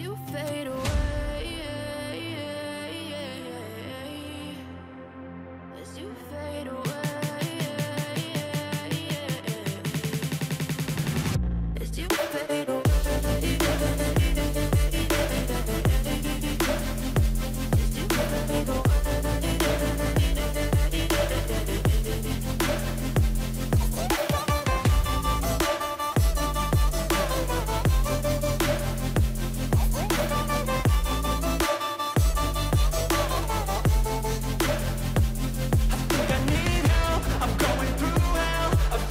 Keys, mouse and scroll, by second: 20.1 Right, 20.1 Right, 20.3 Right, 20.5 Right, 20.6 Right, 20.8 Right, 21.0 Right, 21.2 Right, 21.6 Right, 21.6 Right, 21.8 Right, 22.3 Right, 22.9 Right, 23.3 Right, 25.1 Right, 25.3 ctrl+=, 25.9 ctrl+=, 26.7-27.5 scroll up 12, 29.2-29.9 scroll up 4, 32.7 double click.